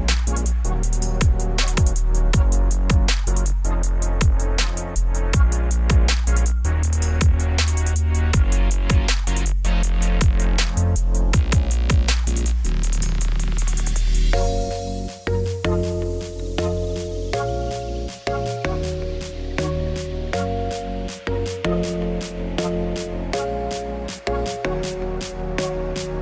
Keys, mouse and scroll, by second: 0.0 shift+s, 0.1 Tab, 0.9 shift+a, 2.1 click, 2.4 Tab, 2.6 s, 4.8 middle click, 5.0 s, 5.5 middle click, 5.7 s, 6.2 click, 6.7 g, 8.2 shift+middle click, 8.4 2, 8.5 scroll up 2, 8.8 ctrl+b, 10.9 alt+click, 11.0 middle click, 11.3 ctrl+b, 12.2 ctrl+z, 12.9 alt+shift+click, 13.2 ctrl+b, 14.8 middle click, 15.4 Tab, 15.8 right click, 16.1-16.4 scroll down 4, 16.4 scroll up 3, 16.7 click, 17.1 middle click, 17.3 g, 18.4 click, 18.8 click, 19.0-20.9 shift+middle drag, 20.9-23.6 drag, 23.9-26.2 shift+drag.